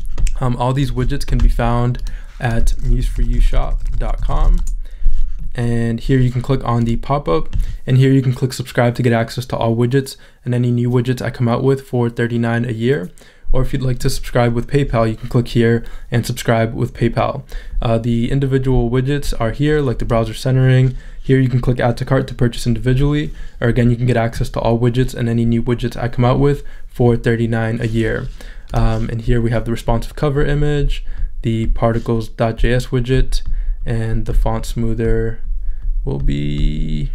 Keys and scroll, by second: 3.3 m, 4.4 p, 5.9 Return.